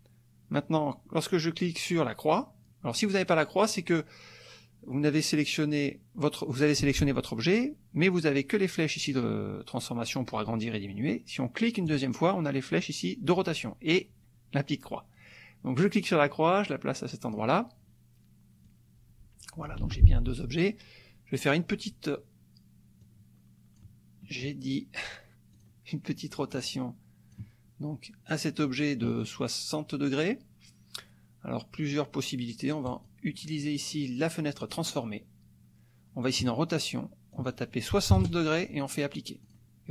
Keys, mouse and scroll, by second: 2.9 click, 3.7 click, 11.9 click, 15.8-17.5 drag, 18.7-19.8 drag, 19.8 ctrl+z, 21.4 click, 23.0-24.0 drag, 24.6 click, 25.1 click, 25.5 click, 26.4-27.6 drag, 28.3 middle click, 32.8 click, 34.8 click, 36.4 click, 37.4 click, 38.1 KP_6, 38.7 KP_0, 39.4 click.